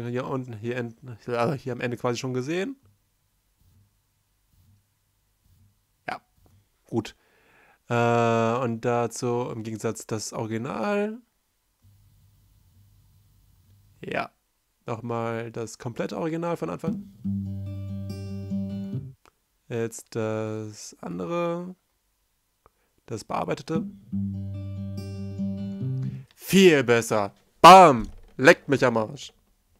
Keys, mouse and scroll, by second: 1.6 F1, 1.8-2.2 right drag, 6.1 right click, 9.7 right drag, 9.8 right click, 11.3 F1, 13.6 space, 14.4 c, 16.6 space, 17.9 space, 19.1 space, 19.2 c, 22.2-23.6 typing, 25.2 right click, 25.2 space, 26.3 space.